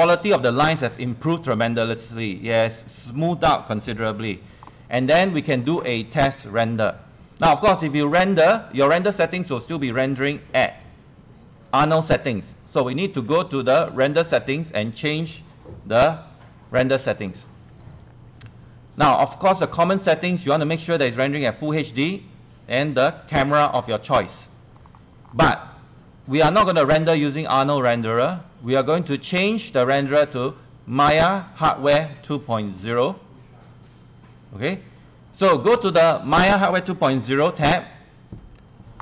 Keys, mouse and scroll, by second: 0.1 scroll up 1, 1.8 scroll up 1, 3.9 right click, 14.8-18.8 drag, 20.1-23.1 scroll down 2, 24.8-25.3 scroll up 2, 28.9 click, 37.3 ctrl+1, 37.3 ctrl+1, 37.8 click, 38.6 Escape.